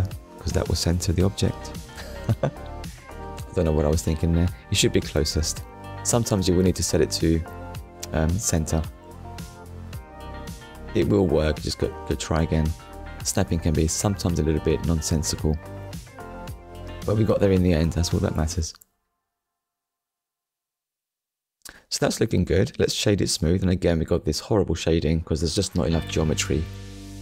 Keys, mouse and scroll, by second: 3.5 click, 4.4 click, 5.7 click, 9.2 click, 10.5 click, 14.7 middle click, 15.5-15.9 scroll down 1, 16.1 middle click, 17.0-17.4 scroll down 1, 17.4 middle click, 21.0 shift+middle click, 22.4 right click, 23.0 click, 23.6 middle click.